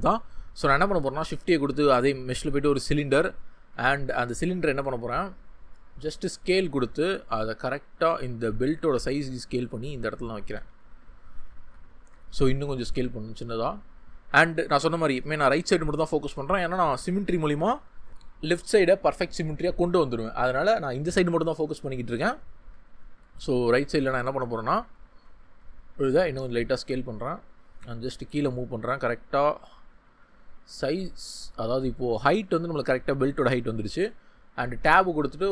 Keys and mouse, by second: 1.0 shift+a, 3.9 ctrl+click, 7.2-8.4 drag, 8.7 g, 9.9 click, 11.8 shift+middle drag, 12.3 s, 13.9 click, 23.6 shift+middle click, 25.4 s, 27.0 click, 27.6 g, 30.4 click, 33.9 Tab.